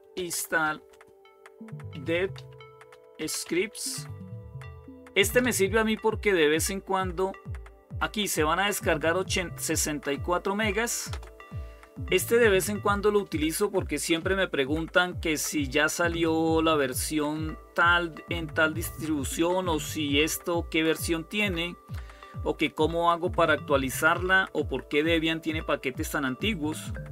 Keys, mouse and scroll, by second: 0.0-4.0 typing, 5.2-5.5 typing, 6.8-7.5 typing, 10.9 Return.